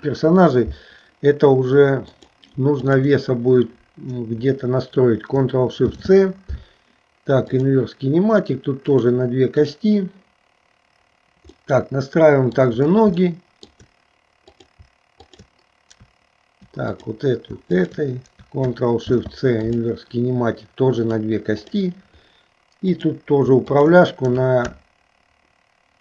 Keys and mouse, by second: 2.1 click, 3.0 shift+click, 5.9 ctrl+shift+c, 9.0 click, 9.7 click, 11.7 middle click, 13.4 shift+middle click, 14.6 click, 15.4 shift+click, 17.0 click, 17.9 shift+click, 19.8 ctrl+shift+c, 21.1 click, 21.7 click, 23.0 click, 23.9 shift+click.